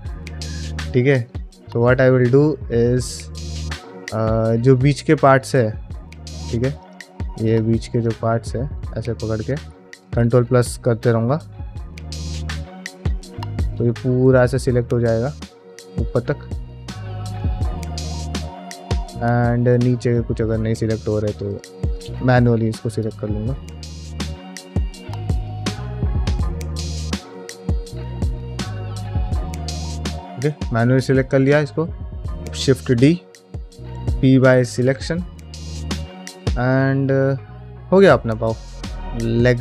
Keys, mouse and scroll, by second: 0.2 KP_Divide, 1.1 middle click, 1.7-2.1 scroll up 1, 2.1 middle click, 3.1-4.5 middle drag, 4.6-4.9 scroll down 2, 4.9 click, 5.2 middle click, 5.7 2, 6.0 3, 6.6 alt+click, 7.3 alt+click, 7.8 alt+click, 8.6 middle click, 9.7 ctrl+KP_Add, 10.8 ctrl+KP_Add, 11.6-15.0 ctrl+KP_Add, 15.5 middle click, 15.9 alt+middle click, 16.2-17.1 scroll up 3, 17.1-17.4 scroll up 1, 17.4 ctrl+KP_Add, 17.9-18.8 scroll down 4, 18.5 shift+middle click, 19.0 shift+middle click, 19.3-20.5 scroll up 4, 19.7 middle click, 20.5 shift+middle click, 21.3 alt+shift+click, 21.8 alt+shift+click, 22.5 ctrl+z, 22.8 alt+shift+click, 23.6 ctrl+z, 23.9 alt+shift+click, 24.2 alt+shift+click, 25.2 alt+shift+click, 25.4 middle click, 25.9 alt+shift+click, 26.3 alt+shift+click, 26.8 ctrl+z, 26.9 alt+shift+click, 27.3 ctrl+z, 27.4 alt+shift+click, 27.8 ctrl+z, 27.9 alt+shift+click, 28.4 alt+shift+click, 29.0 ctrl+z, 29.3 alt+shift+click, 29.7 alt+shift+click, 30.0 scroll down 2, 30.2 shift+middle click, 30.5 scroll down 1, 30.8 middle click, 31.2 middle click, 32.2 shift+d, 33.7 p, 35.4 middle click, 35.6 ctrl+Tab, 36.5 alt+z, 37.8 KP_Divide, 38.4 scroll down 2, 38.7 middle click.